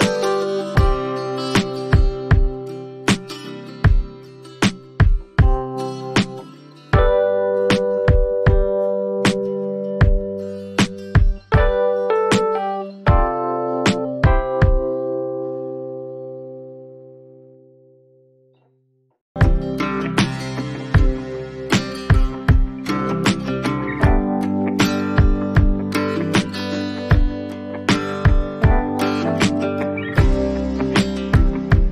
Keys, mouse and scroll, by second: 0.2 click, 2.1 click, 2.4-3.5 alt+scroll down 1, 3.5 alt+scroll down 9, 4.9 click, 9.7 click, 12.1 click, 14.4 click, 20.7 click, 22.9 right click, 24.0 click, 25.9 click, 28.5 click, 28.7 click, 29.4 5, 29.6 5, 29.7 5, 30.1 Return.